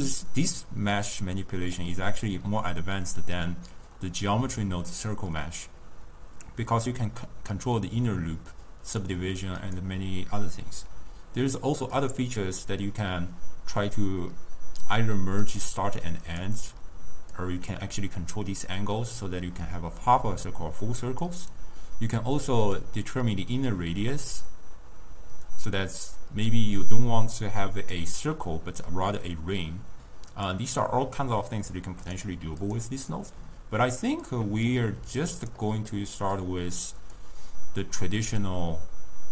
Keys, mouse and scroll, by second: 6.5-9.5 drag, 9.7 click, 11.9 click, 12.3 click, 15.9 click, 16.6 click, 17.4-20.5 drag, 22.9-25.9 drag, 30.4-32.2 drag, 33.0 click, 33.6 click, 34.3-35.3 drag, 36.0-37.3 middle drag, 37.3-39.3 drag.